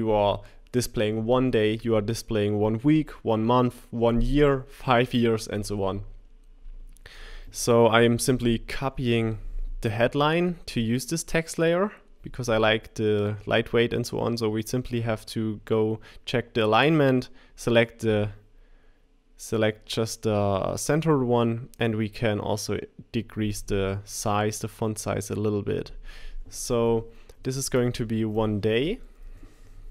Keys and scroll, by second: 8.3 super+c, 9.2 super+v, 27.6 1, 28.8 shift+d, 28.8 shift+BackSpace.